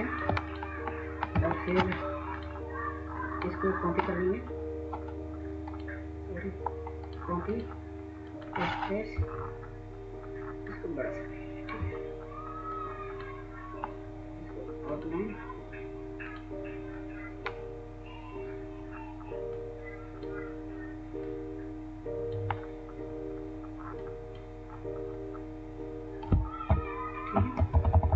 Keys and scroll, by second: 27.0-28.1 Up.